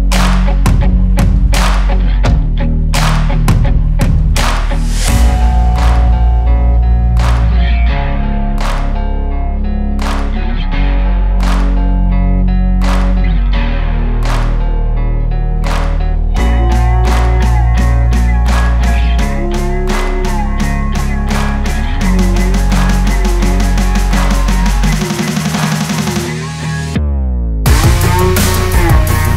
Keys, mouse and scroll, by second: 4.1 Return, 5.5-10.9 drag, 10.9 click, 15.5 Return, 15.8 Return, 18.3 click, 21.7-22.0 alt+scroll up 1, 23.8 alt+scroll down 1, 24.5 alt+scroll up 1, 26.0 click.